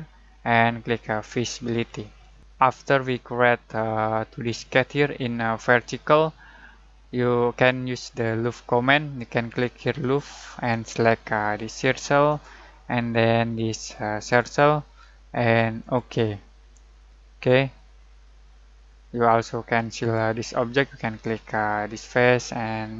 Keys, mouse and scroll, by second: 1.2 alt+click, 10.0 alt+click, 12.3 alt+click, 16.8-21.6 middle drag, 21.8 alt+click.